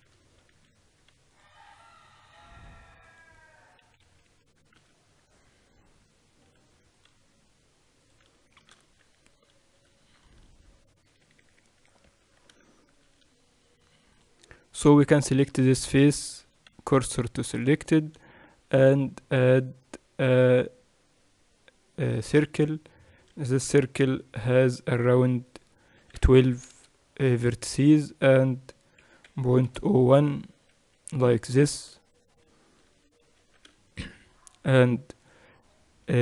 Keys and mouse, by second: 1.1 ctrl+r, 4.5-5.0 KP_6, 5.4 z, 7.1 ctrl+r, 9.5 Tab, 11.8 KP_2, 12.0 KP_2, 12.8 Tab, 14.8-16.0 drag, 16.0 middle click, 16.7-18.3 drag, 16.7 shift+s, 18.3 Tab, 19.0 shift+a, 24.3 F6, 32.0-35.8 middle drag, 34.0 Tab, 35.8-36.2 drag.